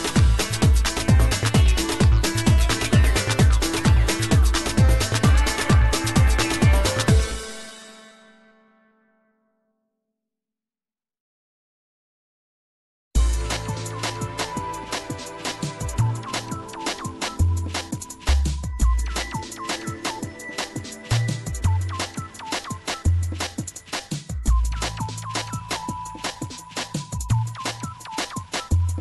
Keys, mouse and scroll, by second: 1.6-3.6 middle drag, 4.9 scroll up 2, 5.0 middle click, 5.8-6.9 scroll up 1, 6.9 scroll up 1, 7.1 shift+s, 11.3-12.6 drag, 14.6-19.4 drag, 19.4-23.8 middle drag.